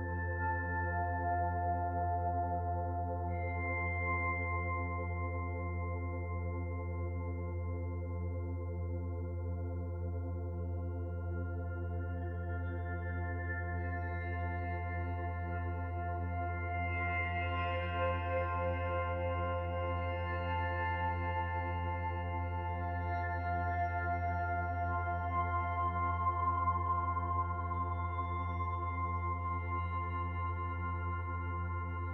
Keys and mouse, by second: 1.0 alt+z, 1.6 middle click, 3.3 click, 4.8-11.4 drag, 13.0-31.4 drag.